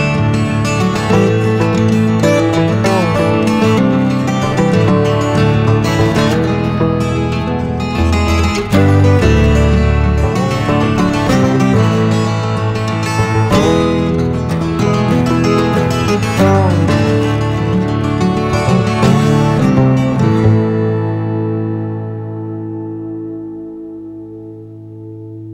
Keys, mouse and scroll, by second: 0.3 shift+d, 0.5 s, 2.4 click, 2.9 click, 3.5 shift+click, 4.1 scroll down 2, 4.2 ctrl+s, 4.4 shift+d, 4.9 shift+click, 5.6 ctrl+s, 5.8-6.4 scroll down 8, 6.4 shift+d, 6.7 shift+click, 7.6 ctrl+s, 7.8 KP_3, 7.9 ctrl+s, 8.3 click, 9.5 shift+Down, 9.9 shift+Down, 10.2 shift+Down, 11.5 ctrl+s, 11.5 g, 15.9 click, 16.2 click, 17.3 click, 18.4 scroll up 2, 18.5 scroll down 1, 18.7 ctrl+s, 19.0-20.8 drag, 20.8 scroll up 1, 21.0 scroll down 2, 21.2 middle drag, 21.3 scroll up 1, 21.4 middle click, 21.9 ctrl+s, 22.1 click, 22.6 click, 23.1 click, 24.0 click, 24.7 click.